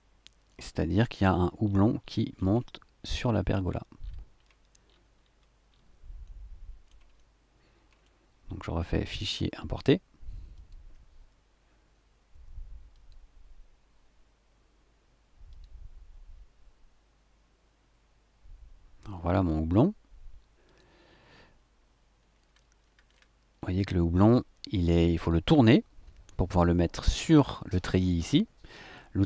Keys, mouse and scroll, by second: 0.5 middle click, 0.5 click, 1.6-2.6 shift+scroll down 6, 3.6-5.9 shift+scroll down 11, 6.2 middle click, 7.1 shift+middle click, 7.3 shift+click, 9.1 click, 10.5 click, 12.9 click, 15.5 click, 20.6 click, 22.2-23.0 scroll up 4, 23.6-26.4 drag, 26.4-27.7 middle drag, 27.7-29.2 scroll up 1.